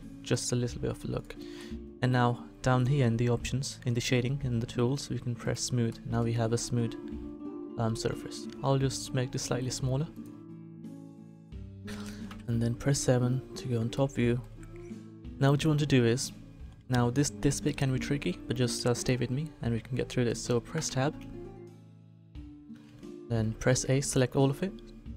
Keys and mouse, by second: 0.2 click, 0.7 Tab, 1.1 click, 6.6 middle click, 8.4 s, 20.7 Tab, 22.9 a, 23.5 a.